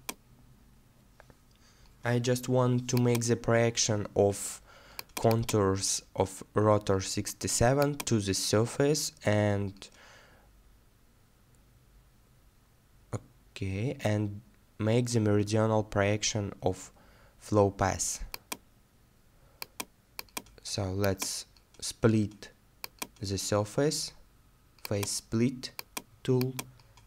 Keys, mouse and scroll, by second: 8.7 middle click, 14.7 middle click.